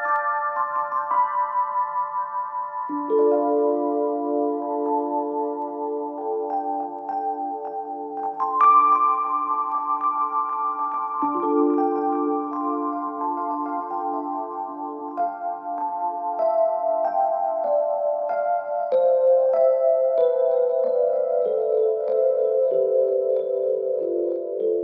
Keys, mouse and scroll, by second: 2.6 ctrl+v, 3.8-4.3 click, 8.9 right click, 10.4 click, 11.2 space, 13.5-14.8 click, 17.6-20.4 alt+click, 21.3 space, 24.3-24.8 alt+click.